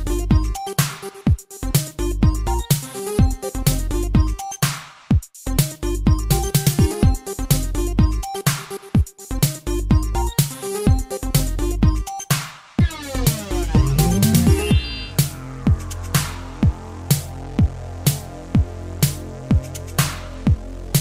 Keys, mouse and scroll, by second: 0.6 click, 5.0 typing, 5.8 click, 5.9 click, 6.1-7.6 typing, 6.8 click, 6.9 click, 7.8 click, 17.7 r, 20.3 click, 20.4 click.